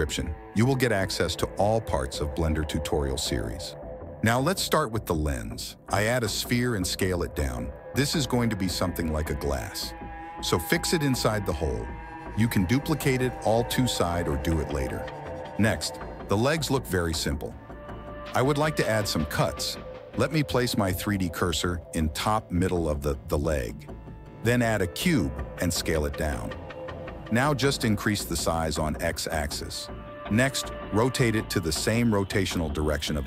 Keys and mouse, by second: 1.7 shift+a, 6.3 s, 9.1 s, 11.7 KP_1, 12.4 shift+d, 15.6 x, 22.1 shift+click, 23.4 shift+a, 25.0 s, 27.6 ctrl+z, 27.6 s, 29.0 s, 30.3 s, 31.4 r.